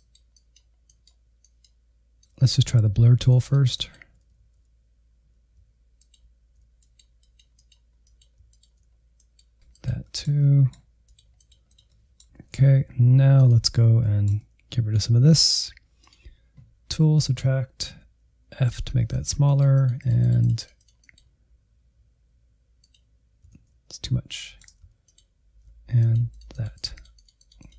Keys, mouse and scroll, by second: 0.0 middle click, 0.3 click, 0.7 alt+z, 1.1 ctrl+click, 1.3 middle click, 1.7 alt+z, 2.0 click, 2.2 shift+middle click, 2.7 click, 3.1 alt+z, 3.9-5.0 ctrl+drag, 5.2 click, 5.7 shift+z, 6.0 click, 6.8 middle click, 7.2 alt+z, 7.5 click, 7.9 middle click, 8.1 click, 8.2 middle click, 8.6 alt+z, 8.9 ctrl+click, 9.5 middle click, 9.7 click, 9.8 middle click, 10.3 click, 10.7 middle click, 11.2 click, 11.7 alt+z, 11.9 middle click, 12.3 alt+z, 13.7 ctrl+click, 14.1-15.9 shift+middle drag, 15.9-17.9 drag, 17.9 f, 19.1-23.7 drag, 23.7 ctrl+z, 24.3 shift+middle click, 25.2 ctrl+click, 25.9-27.7 drag.